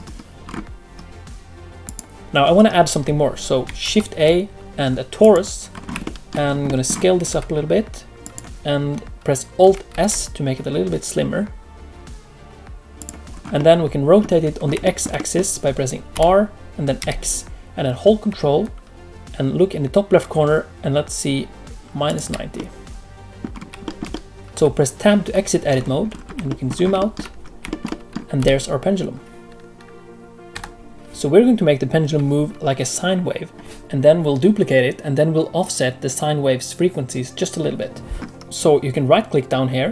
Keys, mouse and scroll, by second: 0.4 click, 0.4-1.8 scroll up 1, 1.8 click, 1.8-2.2 scroll up 3, 2.2 shift+middle click, 3.8 shift+a, 5.7 scroll up 4, 6.0 shift+middle click, 6.4-7.2 scroll down 2, 6.6 middle click, 7.2 s, 10.1 s, 13.3-13.8 scroll down 2, 13.5 middle click, 14.5 scroll up 1, 14.8 shift+middle click, 15.1 middle click, 16.1 r, 22.5 middle click, 23.5-23.8 scroll down 2, 23.8 shift+middle click, 24.1 middle click, 24.5 Tab, 24.5-25.3 scroll down 5, 25.3 Tab, 25.6-26.9 scroll down 6, 26.4 shift+middle click, 26.9 shift+middle click, 27.3 scroll down 1, 27.6 shift+middle click, 27.8 middle click, 28.3 r, 30.9 middle click, 38.2 middle click.